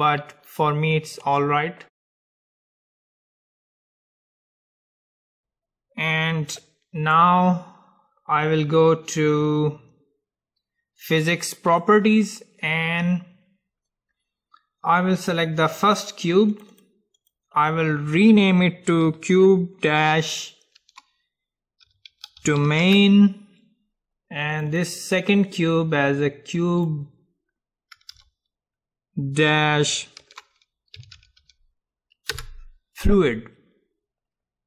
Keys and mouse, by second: 4.1-6.0 drag, 6.0-8.7 middle drag, 11.9-13.9 drag, 15.3-23.0 drag, 24.7-28.2 drag, 28.2 BackSpace.